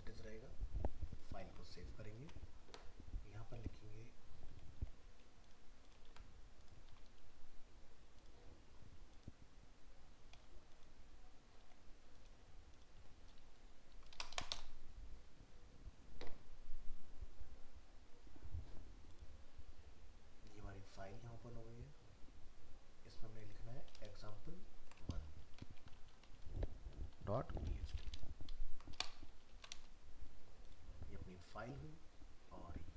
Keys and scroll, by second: 1.4 ctrl+s, 2.2 alt+Tab, 6.1 ctrl+c, 6.9 ctrl+v, 24.1 ctrl+shift+Left, 28.2 ctrl+Left.